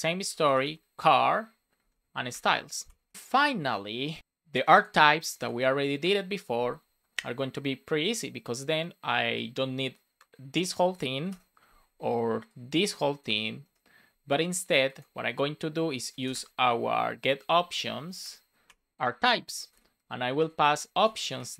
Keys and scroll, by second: 0.2 shift+c, 1.9 space, 2.8 Return, 3.0 super+s, 11.2 BackSpace, 12.3 BackSpace, 13.6 BackSpace, 14.7 BackSpace, 15.5 BackSpace, 16.5 BackSpace, 17.9 shift+o, 18.6 Return, 19.7 shift+9, 21.0 Return.